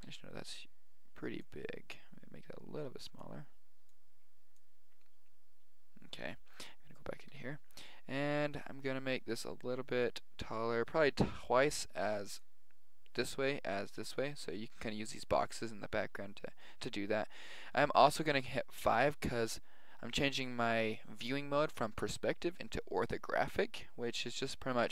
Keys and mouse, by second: 0.0 n, 1.5-3.3 drag, 3.9-5.8 drag, 7.3 n, 8.1 s, 18.8 KP_5.